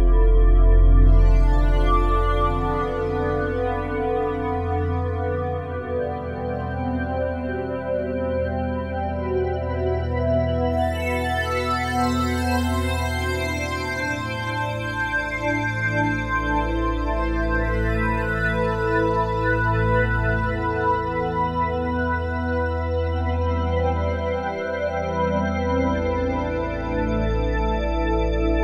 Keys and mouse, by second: 1.8 KP_Divide, 2.9-4.1 ctrl+alt+drag, 4.1 Tab, 5.3-6.5 drag, 6.7-9.1 alt+shift+drag, 8.9 1, 9.7-20.1 ctrl+alt+drag, 11.8 typing, 18.4 typing, 21.3 typing, 21.9-28.6 drag.